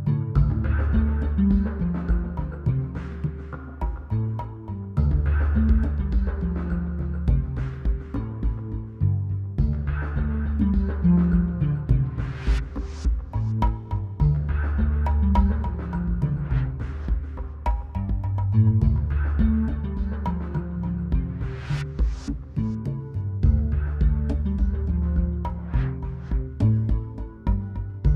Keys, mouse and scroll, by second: 0.1 click, 2.5 click, 10.5-16.4 drag.